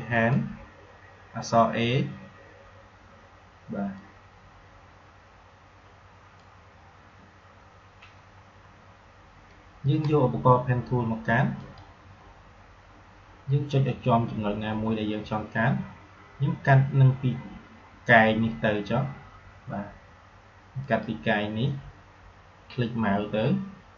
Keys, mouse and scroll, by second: 0.1 click, 3.9-8.7 drag, 11.5 click, 20.8 click.